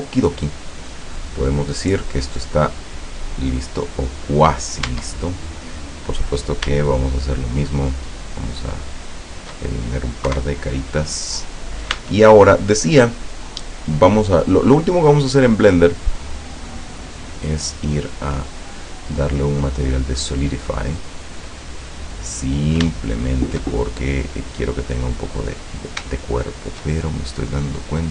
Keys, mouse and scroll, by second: 0.2 scroll down 2, 4.1 right click, 4.6 right click, 4.9 Tab, 6.2 right click, 7.3 shift+right click, 8.9 shift+right click, 10.3 Delete, 11.1 click, 12.0 Tab, 14.4 click, 15.3 click, 18.2 click, 20.9 middle click, 21.9 scroll down 1, 22.5-22.9 scroll up 1, 23.0 shift+middle click, 23.7-24.1 shift+scroll down 1, 24.3 middle click, 24.7 middle click, 25.6-26.0 scroll up 2, 26.2 shift+middle click, 26.7-27.3 shift+scroll up 4, 27.7-28.0 scroll down 2.